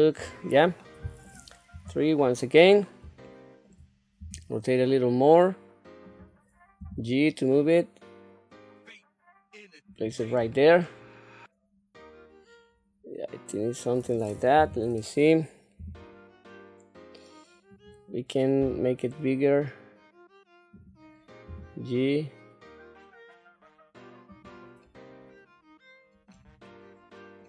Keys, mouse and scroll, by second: 0.1-0.5 scroll up 3, 0.8 middle click, 1.7 KP_3, 2.2 scroll up 2, 3.2 shift+middle click, 4.2 r, 6.8 g, 10.4 scroll down 1, 10.8-14.0 middle drag, 14.5 KP_3, 15.8 g, 18.6 s, 21.4 g, 24.8-26.3 middle drag, 26.6 middle click.